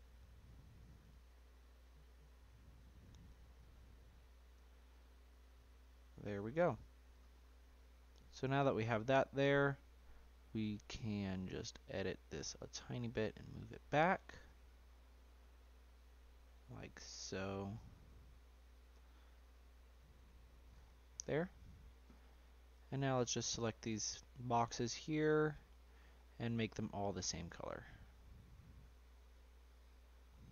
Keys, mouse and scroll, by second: 1.3-2.5 shift+middle drag, 2.5-3.3 scroll up 2, 3.3 g, 7.1 click, 7.4-9.4 middle drag, 9.4-10.1 scroll up 2, 10.1-10.7 scroll down 1, 10.7-11.2 scroll down 2, 11.2-11.6 middle drag, 11.6 scroll down 1, 11.7-12.1 shift+middle drag, 12.1-12.4 shift+scroll up 2, 12.9 click, 13.8 g, 18.6 g, 20.5 scroll down 3, 20.8 scroll up 1, 21.1-21.4 scroll down 1, 21.4-22.7 shift+middle drag, 22.7 click, 23.4-24.6 middle drag, 24.6 shift+click, 25.8 shift+click, 26.5-29.0 shift+drag, 29.7-30.1 scroll down 3, 30.1-30.5 scroll up 5.